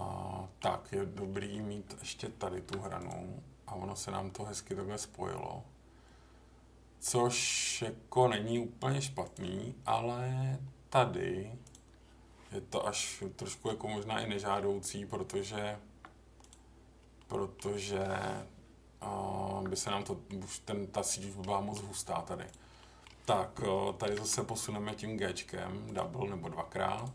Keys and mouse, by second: 1.3 middle click, 2.5 ctrl+r, 9.2 click, 11.6 click, 13.9 middle click, 14.6 Delete, 17.1 middle click, 18.6 Tab, 20.0 middle click, 21.5 middle click, 22.4 click, 22.8 middle click, 24.0 g, 24.2 g, 25.8 click.